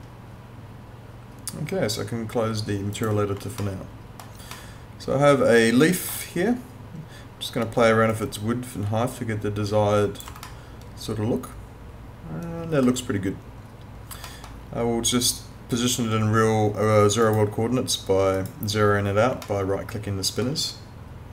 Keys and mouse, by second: 3.0 click, 3.6 alt+middle click, 8.1 click, 10.5 alt+middle click, 14.2 alt+middle click, 17.2 right click, 19.4 alt+middle click.